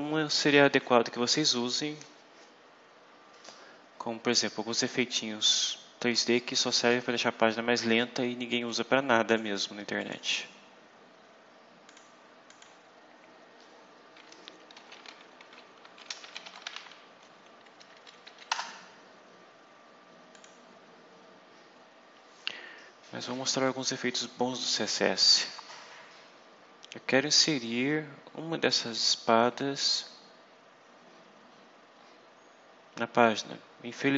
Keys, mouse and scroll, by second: 5.4-7.0 drag, 8.6 click, 9.9 click, 11.8 click, 12.3 click, 15.5-17.1 typing, 17.7 Down, 18.4 Return, 20.2 click, 25.8-26.2 scroll down 2, 26.8-27.1 scroll down 2, 28.9-29.9 scroll down 4, 30.4-31.3 scroll down 4, 31.8-32.6 scroll down 4, 33.9-34.1 scroll down 2.